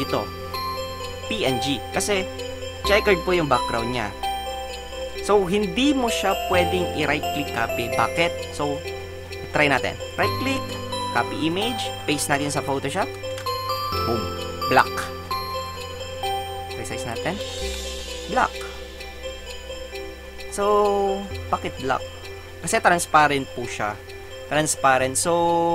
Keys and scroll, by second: 13.4 ctrl+v, 17.7 alt+shift+Return.